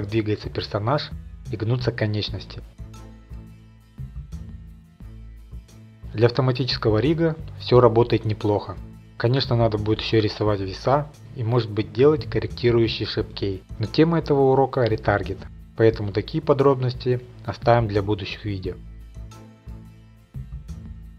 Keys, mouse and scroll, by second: 3.3 right click, 4.2 click, 4.6 r, 4.8 scroll, 6.3-6.6 scroll, 7.0 right click, 7.6 middle click, 8.0 click, 9.7 right click, 9.7 r, 10.8 middle click, 15.2 ctrl+Tab, 15.2 middle click, 15.2 click, 16.7 shift+click, 17.8 click, 19.2 middle click, 19.3 scroll, 19.4 click, 20.3 right click, 20.3 r, 20.9 ctrl+Tab.